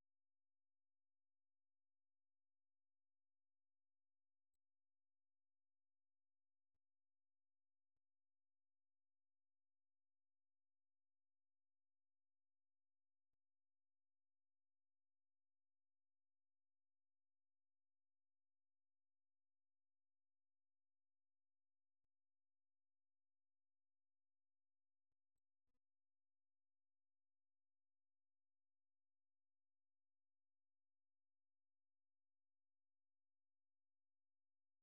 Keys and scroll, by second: 8.9 super+2, 12.5-14.9 typing, 16.7-19.9 typing, 29.2 typing, 30.6 alt+Tab, 34.3-34.8 typing.